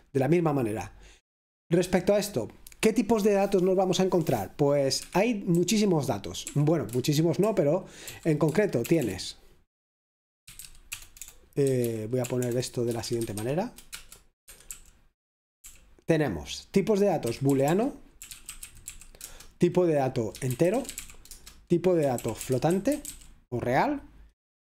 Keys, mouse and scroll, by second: 0.0-1.9 scroll down 1, 1.9-3.1 scroll down 1, 3.1 scroll down 1, 5.0 Escape, 6.2-7.0 typing, 8.2 shift+8, 8.6 space, 10.4-11.1 typing, 14.2-15.6 typing, 17.1-24.5 typing.